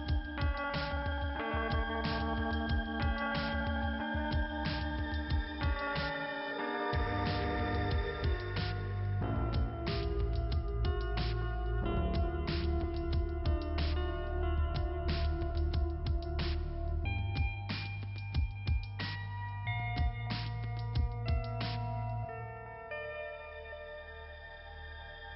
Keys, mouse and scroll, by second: 1.7 click, 2.3 click, 3.5 scroll up 2, 4.3 scroll down 2, 5.5 scroll up 2, 6.7-7.1 scroll down 2, 8.1 click, 8.7 scroll down 1, 9.5 click, 9.9 scroll down 2, 10.9 click, 13.5 click, 14.8 click, 15.8 click, 16.6 click, 17.2 scroll up 2, 19.1 click, 19.9 click, 21.1 click, 22.3 click, 23.3 click, 25.0 click.